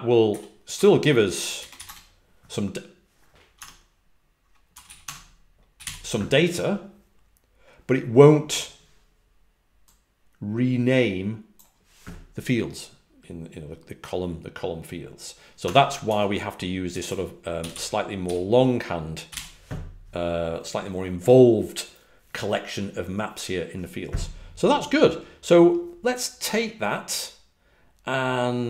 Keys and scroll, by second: 0.7 Escape, 1.8 Return, 1.8 shift+w, 3.5 Escape, 4.3-6.2 typing, 15.6 typing, 17.2-18.2 typing, 19.2 typing.